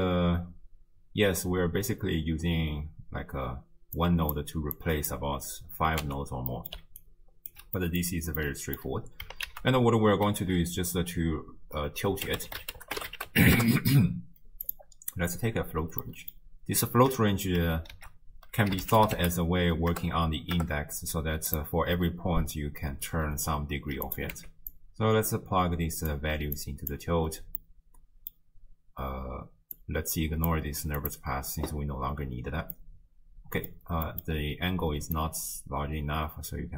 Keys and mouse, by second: 4.0 click, 4.8 click, 6.0 x, 6.5 click, 6.8 d, 7.0 click, 7.5 d, 7.8 click, 7.8 d, 8.4 click, 9.5 ctrl+a, 16.1 click, 18.0 ctrl+a, 24.4 x, 24.7-26.1 drag, 26.6 click, 27.6-28.4 middle drag, 29.9 drag, 31.0 click, 32.9 middle click, 34.1 middle click, 35.2-36.7 drag.